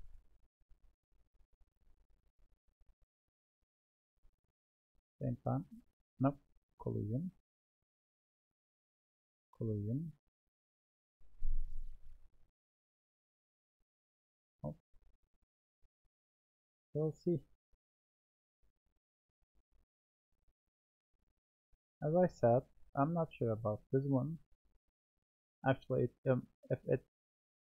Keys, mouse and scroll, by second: 0.9-1.4 scroll down 2, 1.4-3.1 middle drag, 3.1 drag, 5.3-7.8 drag, 12.6-16.1 drag, 16.9-17.9 middle drag, 17.9 click, 19.5-20.9 drag, 20.9-23.1 middle drag, 23.1-27.0 drag.